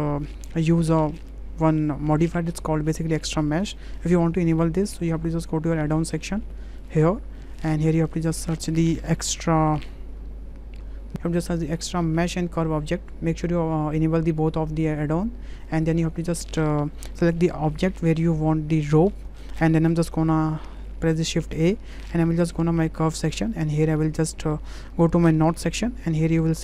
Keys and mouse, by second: 3.6-4.7 drag, 21.5 shift+a.